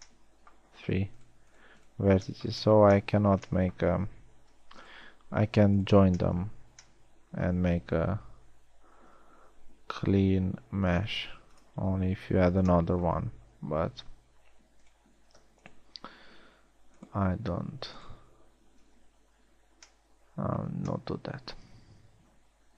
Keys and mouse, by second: 9.5 s, 19.7 f, 20.1 a.